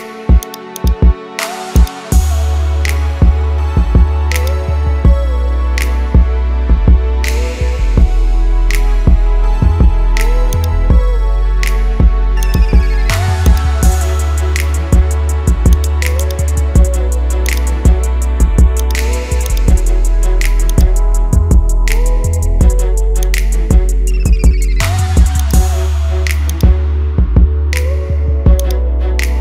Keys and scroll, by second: 6.6 ctrl+z, 22.1 ctrl+z, 27.8 ctrl+z.